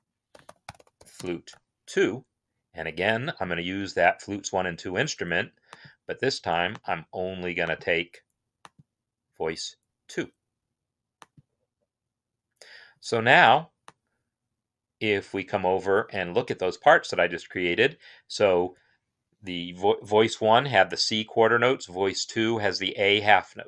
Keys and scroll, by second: 0.0-1.4 typing.